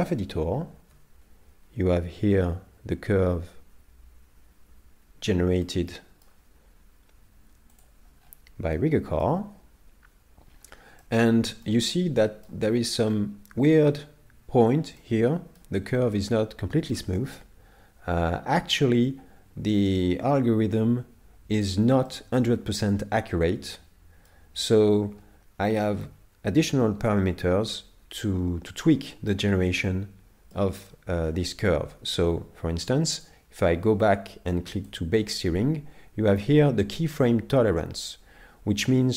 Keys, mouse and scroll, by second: 0.0 click, 5.6 middle click, 7.8 click, 8.3-8.9 scroll up 5, 8.7 middle click, 10.5 scroll up 2, 11.0 middle click, 12.7 scroll up 1, 15.0 middle click, 15.8-16.2 scroll down 4, 22.1 middle click, 25.5 scroll down 1, 27.1 middle click, 27.1 scroll down 6, 29.5-30.1 scroll down 4, 29.9 middle click, 33.2 click.